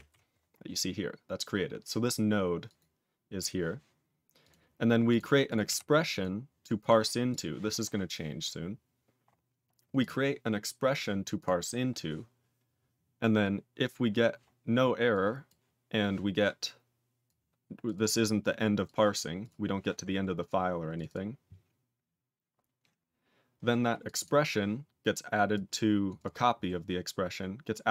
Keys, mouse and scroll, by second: 5.6 q, 6.0 click, 6.7 click, 7.2 click, 9.9 click, 11.3 click, 11.9 click, 15.1 click, 15.4 click, 17.2 click, 17.8 click, 17.9 click, 18.8 click, 19.1 click, 19.3 click, 21.0 double click, 24.0 click, 24.1 double click, 25.5 click, 26.0 click, 26.1 click, 27.8 click.